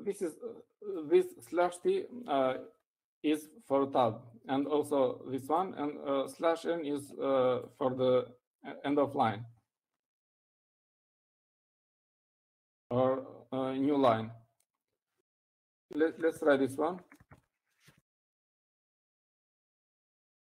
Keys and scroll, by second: 17.4-19.7 typing.